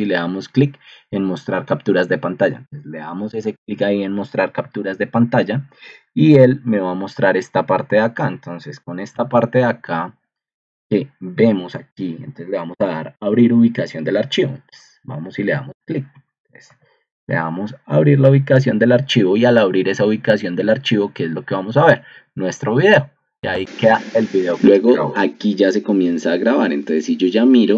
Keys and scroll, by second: 3.2 Escape, 4.6 super+g, 6.7 2, 9.1 ctrl+2, 15.5 Escape, 16.6 super+g.